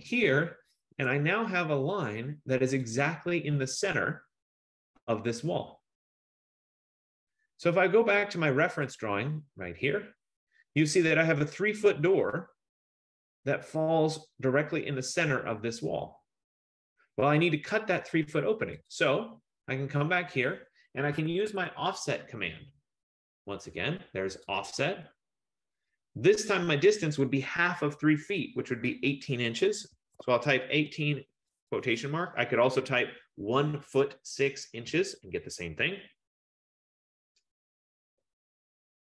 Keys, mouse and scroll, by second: 0.3 click, 1.0 Return, 1.1 F15, 3.0 click, 9.2 click, 19.1 click, 21.4 Escape, 24.8 click, 29.8-31.4 typing.